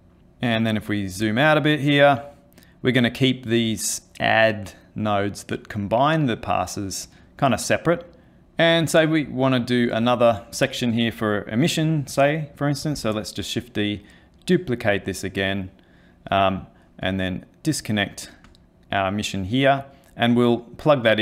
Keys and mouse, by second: 0.2 middle click, 0.4 ctrl+middle click, 1.5 click, 2.8 click, 8.4 middle click, 9.2 click, 13.0 shift+d, 17.6 ctrl+right click.